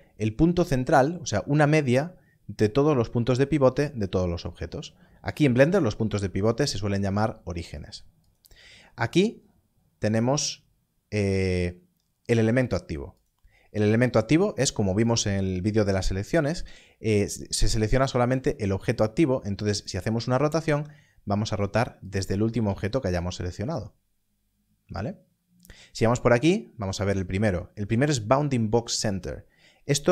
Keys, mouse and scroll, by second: 13.1 click, 18.0 shift+click, 19.8 click, 20.5 r, 21.5 right click, 22.0 shift+click, 22.5 r, 23.6 right click, 28.9 click.